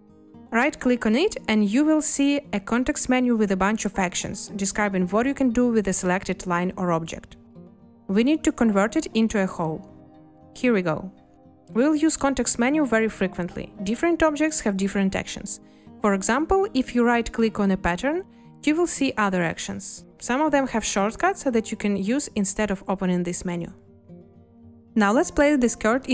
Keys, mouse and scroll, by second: 15.3 a, 25.7 2.